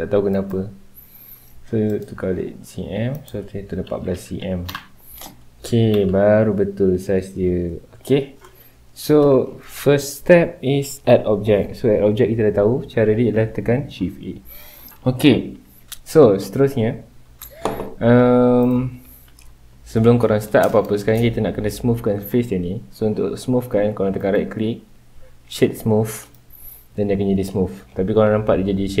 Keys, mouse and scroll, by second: 0.3-4.7 drag, 4.7 KP_Enter, 5.9 KP_Decimal, 6.6 scroll down 2, 6.9-8.2 middle drag, 8.2-8.6 scroll up 2, 8.6-12.5 middle drag, 18.6-20.4 right drag, 20.4-21.2 middle drag, 21.2-21.9 scroll up 2, 21.9-22.6 scroll up 1, 24.2 right click, 26.7 scroll down 2, 26.9-27.5 middle drag, 27.5-27.9 scroll up 2, 27.9-28.6 middle drag, 28.6-29.0 scroll down 2.